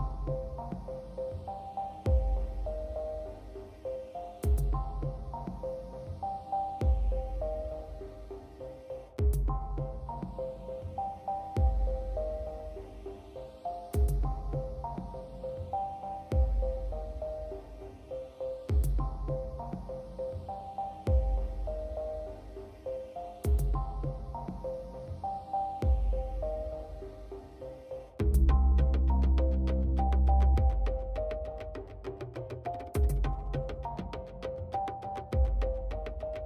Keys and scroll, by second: 0.0 alt+x, 0.1 F3, 0.3 alt+x, 2.5 ctrl+z, 3.7 f, 4.2 ctrl+z, 4.7 ctrl+z, 4.7 ctrl+z, 5.4 ctrl+z, 10.1 alt+x, 14.7 Delete, 15.3 F4, 16.0 g, 17.6 f, 19.6 shift+s, 19.7 shift+s, 24.4 f, 28.3 shift+s, 28.5 shift+s, 33.9 shift+s, 34.5 shift+s.